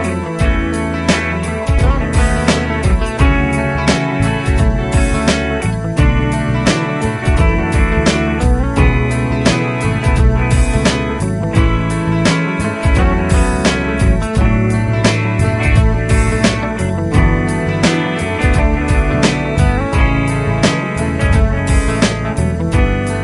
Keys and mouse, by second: 17.8 right click, 22.6 F12.